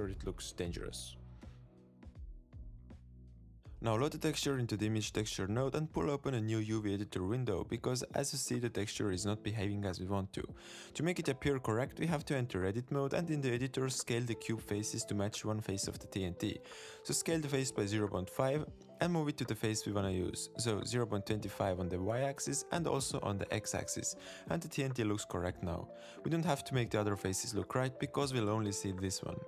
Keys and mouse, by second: 6.8 shift+drag, 7.6 shift+drag, 10.0 click, 12.0-13.0 drag, 13.3 Tab, 15.8 a, 17.4 s, 23.5 g, 28.8 g.